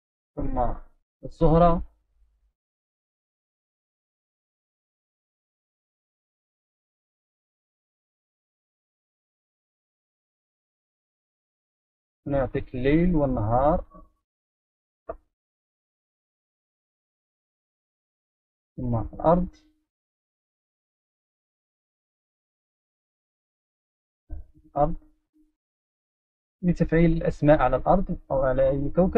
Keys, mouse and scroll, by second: 0.7 click, 6.2-7.8 drag, 7.8 right click, 8.9 right click, 9.8 right click, 10.7-13.9 right drag, 14.3 right click, 16.4-18.9 right drag, 18.9-19.6 drag, 24.1-25.7 right drag, 26.3 right drag.